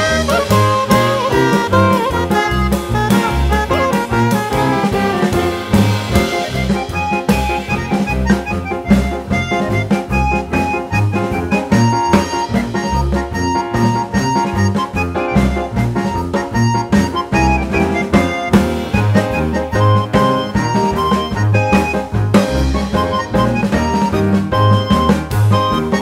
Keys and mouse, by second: 1.8 click, 2.1 click, 3.5-5.1 drag, 5.6 click, 6.7-8.1 drag, 9.4 click, 9.7 click, 11.4-13.2 drag, 14.2 click, 14.8 click, 15.0 click, 15.6 click, 15.8 click, 16.0 click, 16.6 click, 17.0 click, 17.4 click, 17.6 shift+click, 18.2 click, 18.5 click, 18.7 shift+click, 19.1 click, 19.4 click, 19.8 click, 20.0 click, 20.2 click, 20.9 click, 21.3 click, 21.7 click, 21.8 click, 22.0 click, 22.9 click, 23.1 click, 23.8 click, 24.1 click, 24.3 click, 24.7 click, 25.0 click, 25.6 click, 25.8 shift+click.